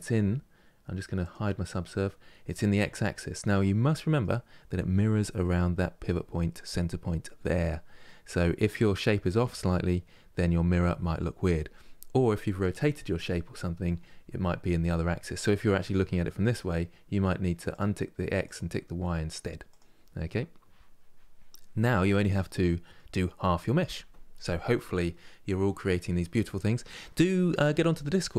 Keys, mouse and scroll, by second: 0.9 click, 3.3-6.5 middle drag, 7.7-10.8 middle drag, 14.9-17.4 middle drag, 17.4-19.9 drag, 19.9-25.3 middle drag.